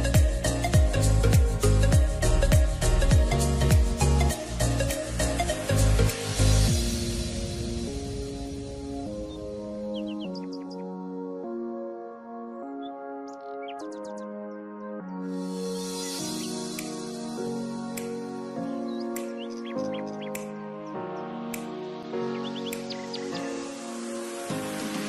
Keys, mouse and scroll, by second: 5.9-9.8 drag.